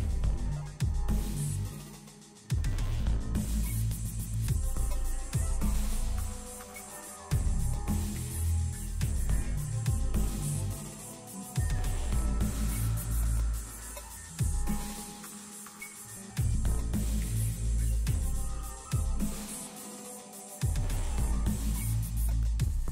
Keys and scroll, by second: 4.0 alt+a, 9.1 ctrl+shift+s, 10.7 d.